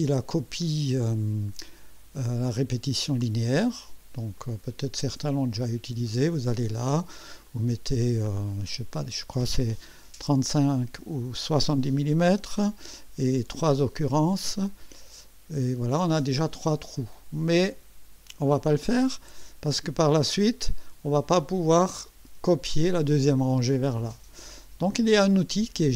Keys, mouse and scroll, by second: 4.3 click, 5.5 click, 7.4-9.1 drag, 10.0 BackSpace, 10.6 click, 11.9-12.8 typing, 14.5 click, 25.3 click.